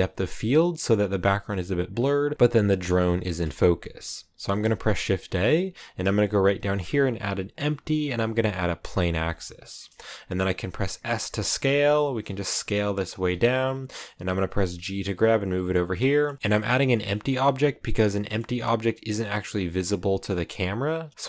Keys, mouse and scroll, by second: 1.1-1.8 scroll up 1, 1.8-2.5 scroll up 1, 2.5-4.4 scroll up 2, 2.7 shift+middle click, 3.3 shift+middle click, 4.4-5.9 scroll up 1, 9.2-10.4 scroll down 5, 10.5 s, 12.0 s, 12.8 scroll up 3, 13.1 s, 14.2 g, 15.6-17.3 middle drag, 17.3-17.7 scroll down 1, 17.7 middle click, 18.4 g, 21.1-21.2 middle drag.